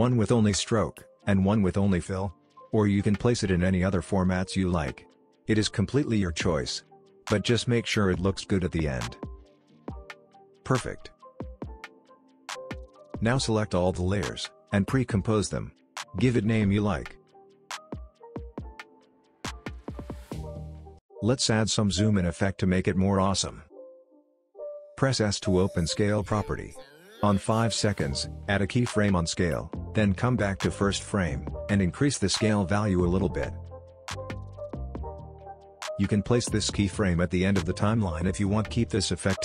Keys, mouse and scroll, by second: 0.3 click, 0.8 ctrl+d, 1.1-1.7 click, 1.9 click, 2.0 ctrl+d, 2.3-2.6 click, 2.9 scroll down 1, 3.2 click, 3.3 ctrl+d, 3.6 shift+click, 3.6 typing, 4.0 click, 4.5 click, 4.6 ctrl+d, 4.8 shift+click, 4.9-6.3 typing, 5.5 click, 5.6 ctrl+d, 5.8-8.9 shift+drag, 9.0 space, 10.9 space, 12.9 typing, 13.0-14.3 drag, 14.4 right click, 15.7 click, 17.3-18.5 typing, 19.5 Return, 20.8 click, 21.3 typing, 21.7-25.8 drag, 26.8 s, 27.9-30.3 drag, 34.9 space, 35.0-35.6 click, 36.2-38.1 drag.